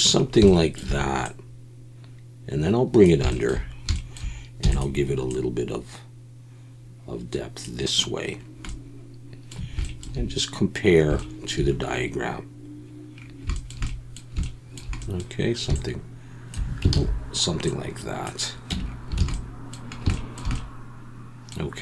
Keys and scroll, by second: 4.6 e, 16.9 ctrl+z, 18.7 Tab, 19.2 alt+a.